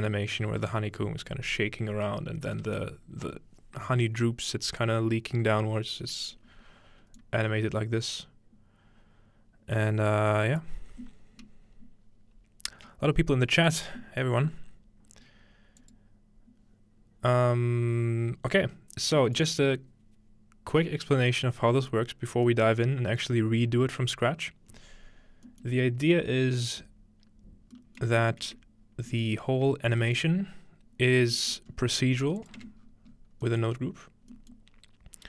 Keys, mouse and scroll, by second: 0.1-1.7 middle drag, 2.6 space, 7.2-12.5 drag, 19.2-27.7 middle drag, 22.5-23.4 scroll up 1, 23.4-24.0 scroll up 1, 24.0-25.1 scroll up 1, 28.0 shift+middle click, 28.5-29.4 middle drag, 28.8-30.3 scroll down 2, 31.7-32.4 scroll up 1, 32.4 click, 32.6 Tab, 32.8-35.2 scroll down 1.